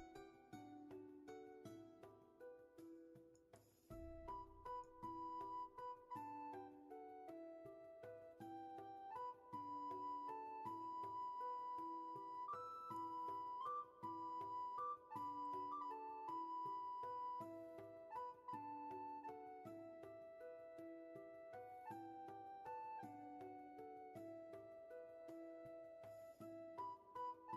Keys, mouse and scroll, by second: 2.0 ctrl+z, 6.5 ctrl+z, 25.7 space, 26.7-27.5 scroll down 1.